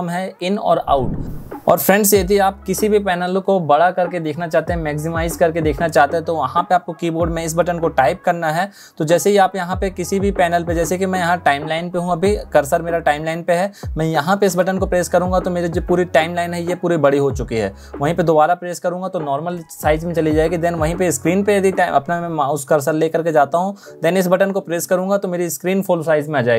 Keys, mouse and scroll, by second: 7.2 `, 14.3 `.